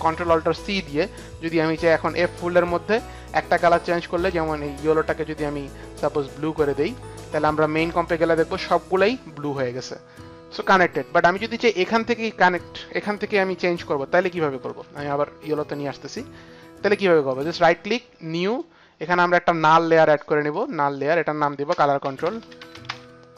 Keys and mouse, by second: 3.7 click, 6.8 click, 7.8 click, 9.7 click, 14.6 ctrl+z, 17.3 ctrl+z, 17.3 right click, 17.7 ctrl+z, 17.7 right click, 18.5 ctrl+z, 18.5 right click, 18.5 click, 20.5 right click, 20.5 click, 20.9 right click, 20.9 click, 21.5 click, 21.7 Return, 21.8-23.3 typing.